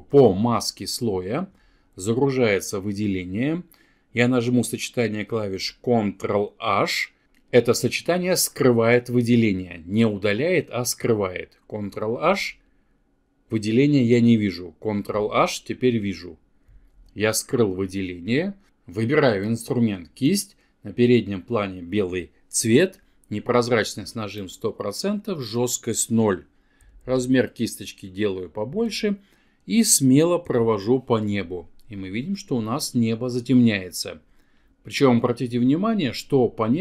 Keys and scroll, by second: 5.2 ctrl+h, 11.1 ctrl+h, 14.7 ctrl+h.